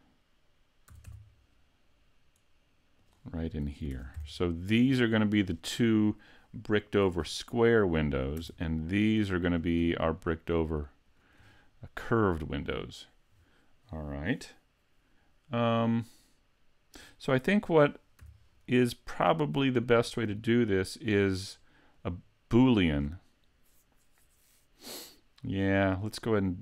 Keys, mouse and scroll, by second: 1.0 s, 3.1 click, 3.9 ctrl+Tab, 4.6 right click, 5.2 shift+right click, 8.5 Tab, 9.5 right click, 10.2 shift+right click, 11.1 shift+right click, 18.2 z, 18.5 middle click, 20.1-20.6 scroll up 2, 20.6 shift+middle click, 21.4 middle click.